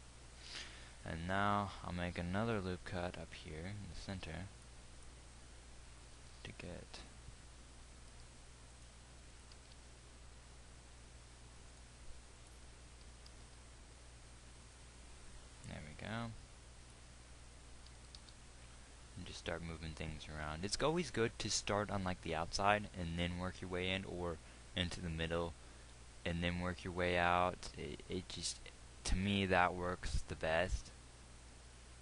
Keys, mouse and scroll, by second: 2.9 ctrl+r, 6.7 g, 10.0 g, 18.3 g.